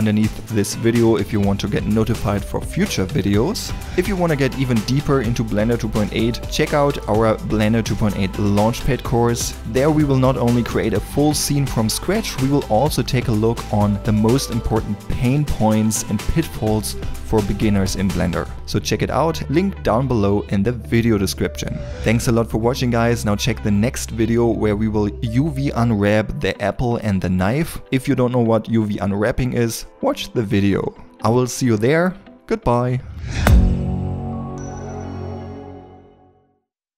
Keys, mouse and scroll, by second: 18.9 middle click.